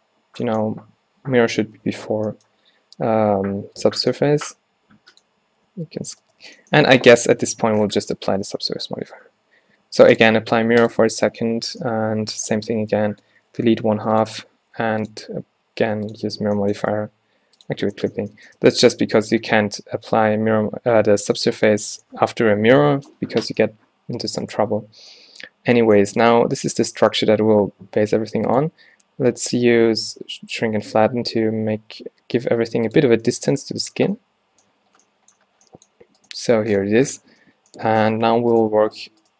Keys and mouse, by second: 1.9-2.5 drag, 3.9 Tab, 3.9 click, 4.3 a, 4.4 a, 6.4 Tab, 6.7 drag, 6.9 Tab, 7.6 a, 11.4 Tab, 12.2 z, 12.6 a, 12.7 b, 13.5 x, 15.1-16.3 drag, 16.4 z, 16.9 Tab, 18.7 Tab, 22.0 click, 24.4-25.3 drag, 24.7 z, 25.0 z, 26.2 Tab, 27.0 Tab, 27.3 a, 27.5 a, 33.3-34.0 drag, 33.6 Tab, 37.4 Tab.